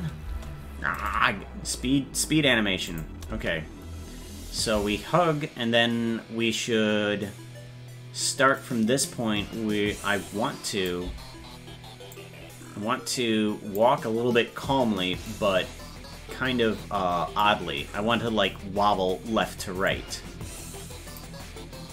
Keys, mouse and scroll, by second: 1.0 right click, 2.9 click, 3.3 space, 8.6-10.9 drag, 12.1-13.8 drag, 15.3-17.4 drag, 18.4-18.7 scroll down 1, 19.9-21.2 drag.